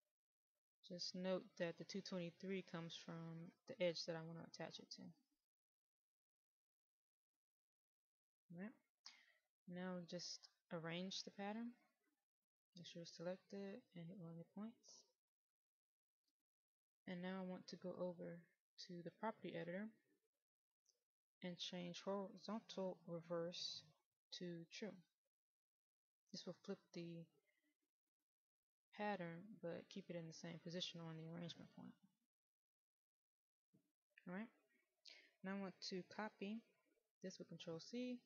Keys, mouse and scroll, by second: 6.7-9.2 middle drag, 10.8-19.1 drag, 26.3 click, 37.5 ctrl+c.